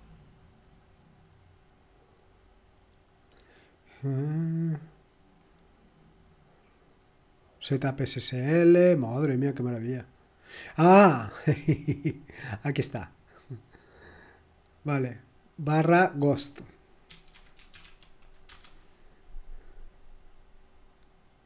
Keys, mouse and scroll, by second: 1.7-2.4 scroll down 1, 2.4-3.0 scroll down 1, 3.3-3.6 scroll down 2, 3.8-4.6 scroll down 2, 4.6-5.4 scroll down 1, 6.1-6.8 scroll down 2, 6.8-7.5 scroll down 1, 7.5-8.2 scroll down 1, 8.2-9.2 scroll down 1, 10.4-11.5 scroll up 1, 11.5 click, 11.7 click, 12.7-13.7 drag, 14.5 click, 15.2 click, 16.0 click, 17.0-18.3 typing, 18.5 Return.